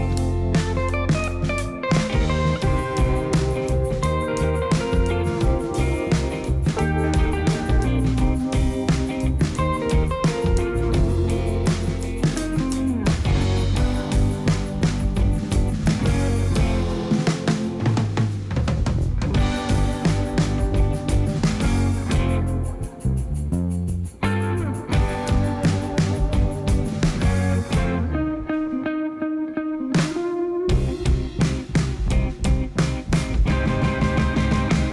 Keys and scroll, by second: 8.8 ., 9.0 2, 9.4 Return, 10.7 Tab, 14.6 ., 14.8 2, 15.2 Return, 19.6 ., 19.8 2, 20.2 Return, 24.7-27.0 typing, 27.5 Return, 31.6 5, 31.9 Return, 32.7 Tab, 34.7 3.